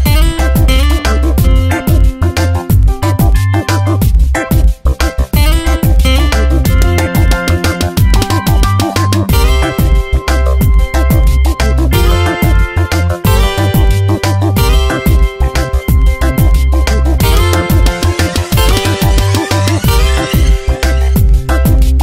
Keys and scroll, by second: 0.1 Tab, 3.8 ctrl+t, 8.2 Return, 8.4 e, 14.1 Tab, 14.8 space, 15.7 v, 18.7 F9, 19.8 ctrl+z, 21.5 m.